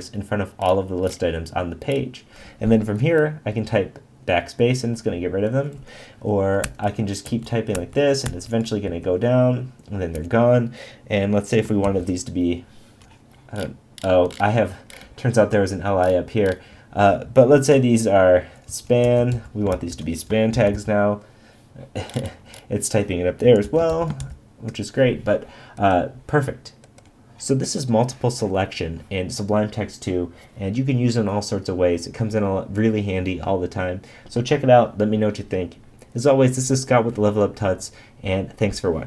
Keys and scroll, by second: 11.8 shift+<, 19.7 shift+>, 20.5 shift+<, 24.2 shift+>.